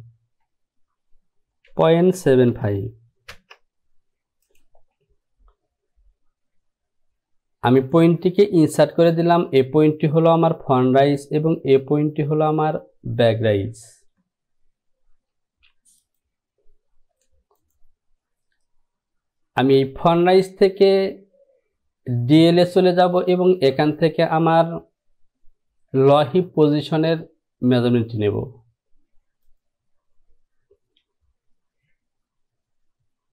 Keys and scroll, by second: 2.3 KP_7, 2.6 KP_5, 3.4 Return.